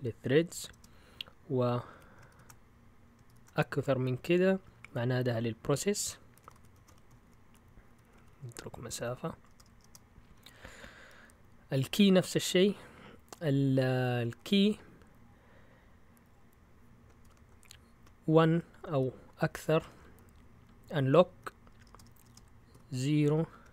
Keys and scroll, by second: 0.0-3.2 typing, 6.3-11.9 typing, 14.3 typing, 17.2 :, 18.9-22.7 typing.